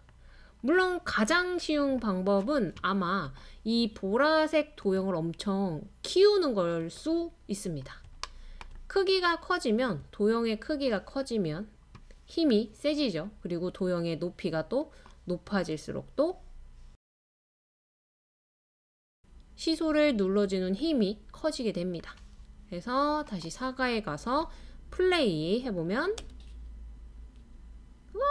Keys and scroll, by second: 26.2 space, 26.2 space.